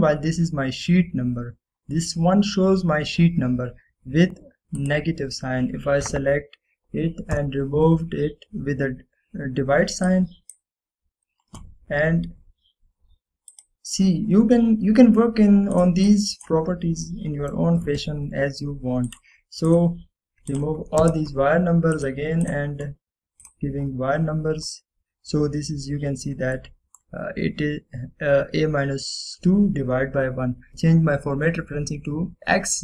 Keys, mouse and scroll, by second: 5.9 click, 8.5 /, 11.2-11.8 drag, 14.6 click, 15.2-15.6 scroll down 1, 16.8-17.8 click, 17.7 scroll down 1, 18.2-18.8 middle drag, 20.2 click, 22.1 Return, 23.0 click, 25.7 scroll up 1, 27.7-28.3 middle drag, 30.7 click.